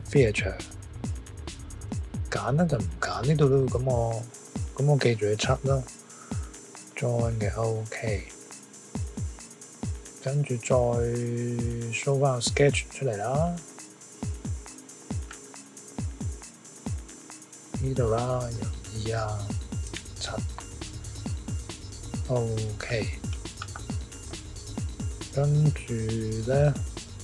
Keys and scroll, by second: 18.4 e, 20.1 7.